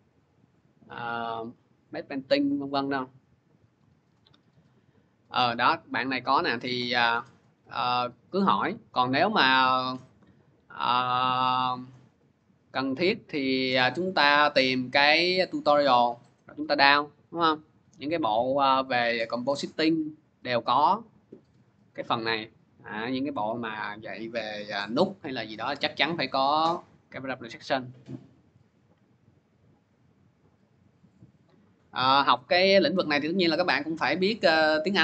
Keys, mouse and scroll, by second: 32.5-34.3 drag.